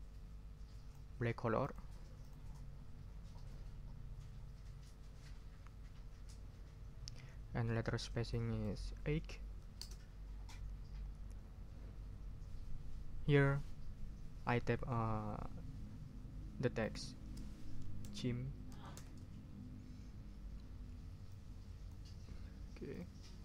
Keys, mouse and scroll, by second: 1.6 click, 2.2 click, 8.3 click, 9.1 8, 9.8 Return, 16.8 click, 17.5-19.4 typing, 21.3 click, 22.9 click.